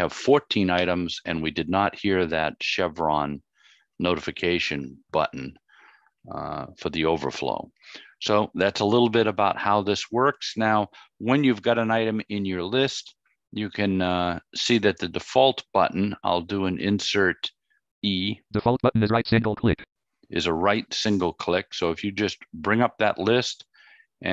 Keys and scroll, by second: 16.0 Insert, 16.0 e.